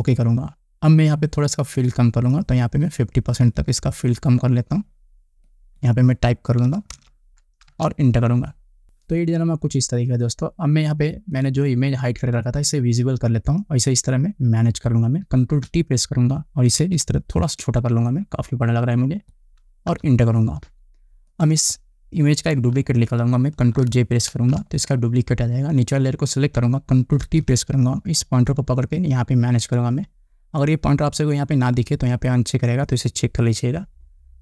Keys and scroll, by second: 7.1 5, 8.2 Return, 17.5 ctrl+t, 20.6 Return, 25.0 ctrl+j, 27.9 ctrl+t.